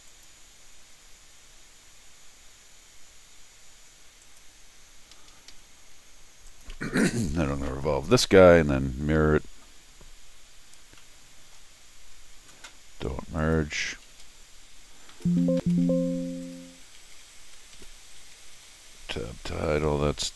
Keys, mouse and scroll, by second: 0.1 click, 4.2 click, 5.1 Escape, 5.3 Escape, 5.5 Escape, 6.5 click, 6.7 v, 8.4 middle click, 10.0 middle click, 10.3 scroll down 1, 10.8 middle click, 11.0 middle click, 12.1 scroll up 1, 13.4 click, 15.6 Tab, 16.4 click, 16.8 Tab, 17.0 Tab, 17.3 Tab, 17.5 Tab, 17.7 Tab, 19.0 scroll down 2, 19.6 click.